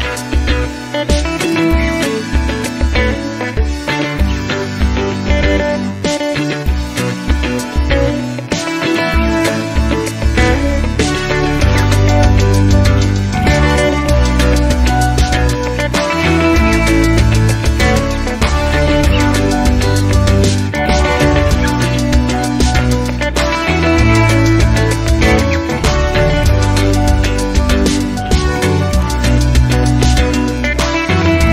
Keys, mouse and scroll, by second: 0.2 0, 1.0 scroll down 2, 1.5 scroll up 2, 3.4 click, 4.1-4.6 scroll down 2, 4.9 click, 5.7 click, 6.7-7.6 typing, 8.4 click, 8.7-9.7 typing, 10.3 click, 11.5 3, 11.8 0, 13.2-13.6 scroll down 2, 15.6 click, 16.9 click, 19.1-21.3 drag, 21.8-23.4 drag, 24.0 0, 24.7-27.1 drag, 27.5 click, 30.7 click, 31.0 click.